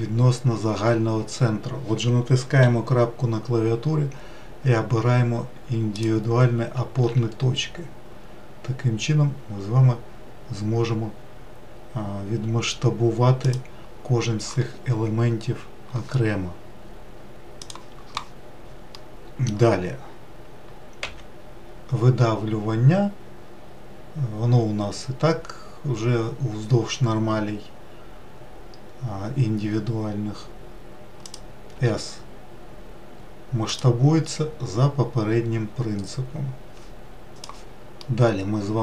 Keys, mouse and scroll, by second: 2.6 ., 7.0 s, 19.0-21.1 middle drag, 21.1 e, 31.8 s, 37.6-38.8 middle drag.